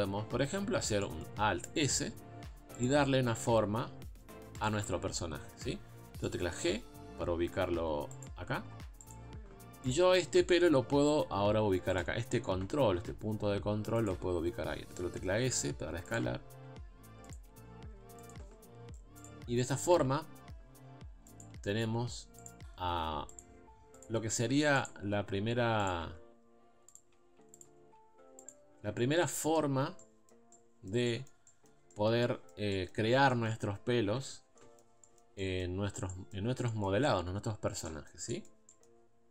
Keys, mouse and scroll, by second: 0.4 scroll up 1, 1.0 shift+middle click, 1.8 alt+s, 3.4 alt+s, 6.3 shift+middle click, 6.6 g, 8.6 alt+s, 9.9 click, 10.2-11.2 shift+middle drag, 11.2 g, 13.0 s, 15.4 g, 16.4 s, 17.9 g, 19.2 click, 19.9 r, 21.5 s, 23.4 click, 24.0 click, 24.4 g, 25.5 r, 26.0 s, 27.6 click, 27.8 g, 28.7 scroll down 3, 28.8 Tab, 29.0 middle click, 29.7 scroll up 1, 30.0-33.0 middle drag, 33.0 Tab, 33.3 middle click, 34.2 Tab, 34.4 scroll down 1, 34.6 middle click, 34.8 scroll up 1, 35.0 middle click, 35.8-36.1 scroll up 1, 36.1 middle click, 36.5 scroll down 2, 36.7 middle click, 37.1-37.9 scroll up 2, 37.9 scroll up 1, 37.9-39.0 middle drag, 39.0-39.3 scroll up 2.